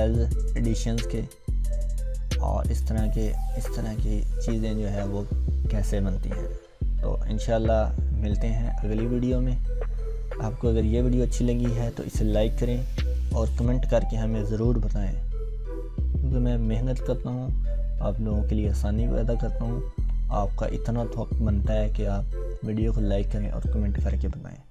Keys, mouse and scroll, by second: 0.4-1.0 scroll down 1.